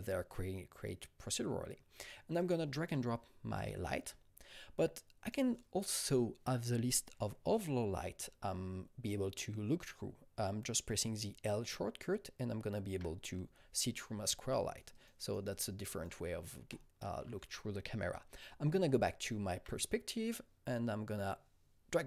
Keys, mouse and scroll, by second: 2.3 click, 2.4-8.6 drag, 11.0-12.7 drag, 11.0-12.7 typing, 14.6 alt+right click, 14.9 alt+double right click, 15.2 alt+right click, 15.5-18.8 alt+drag, 15.5 typing, 16.2 alt+right click, 16.7-19.5 alt+middle drag, 18.8-20.2 typing, 20.2-22.0 alt+middle drag, 20.2 alt+right click, 21.2-22.0 drag.